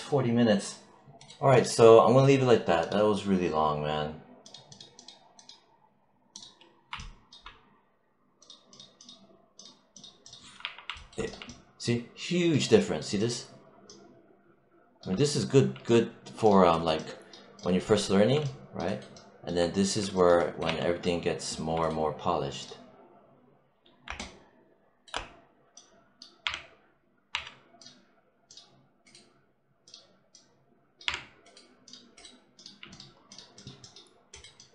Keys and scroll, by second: 10.5 3, 20.5 1, 26.3 3, 30.9 3.